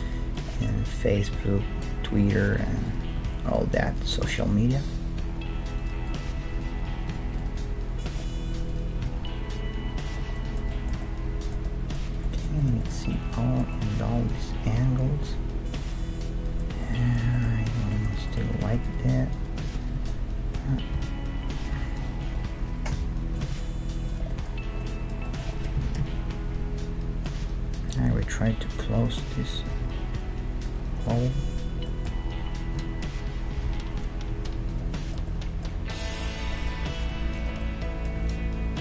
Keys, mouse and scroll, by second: 0.3-2.1 right drag, 0.8 g, 2.1 middle click, 2.9-5.8 right drag, 3.2 g, 4.2 g, 6.0-10.4 right drag, 6.3 g, 7.5 g, 9.0 g, 10.4-15.7 middle drag, 13.0 Tab, 16.8-18.8 middle drag, 18.6 Tab, 18.8-21.6 right drag, 19.9-21.0 middle drag, 21.0 e, 21.4 middle click, 21.8 s, 23.0 o, 23.4 s, 24.3-27.5 middle drag, 25.8 s, 27.8-29.7 middle drag, 28.1 s, 29.7 g, 32.0-33.9 middle drag, 32.8 s, 35.0-36.2 middle drag, 36.9 g, 38.2 Tab.